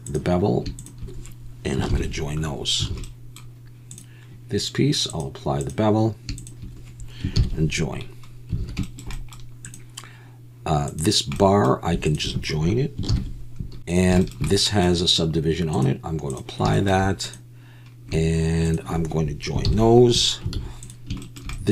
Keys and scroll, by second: 1.9 ctrl+j, 2.9 alt+a, 7.4 ctrl+j, 8.6 alt+a, 13.1 ctrl+j, 13.8 alt+a, 19.7 ctrl+j, 20.6 alt+a.